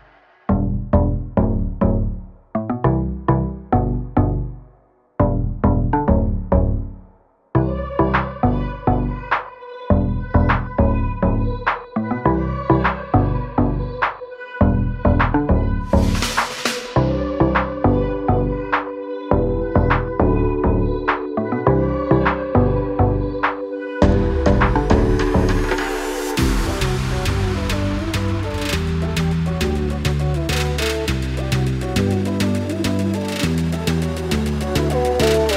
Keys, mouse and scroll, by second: 0.2 scroll down 1, 1.2 click, 1.8 scroll up 1, 2.3 scroll down 1, 2.9 click, 5.9 click, 7.2 scroll down 1, 8.6 click, 9.5 click, 11.5 click, 13.5 click, 14.6 click, 16.5 click, 20.4 click, 24.9 click, 27.8 click, 30.8 click, 31.7 ctrl+a, 32.7 Delete.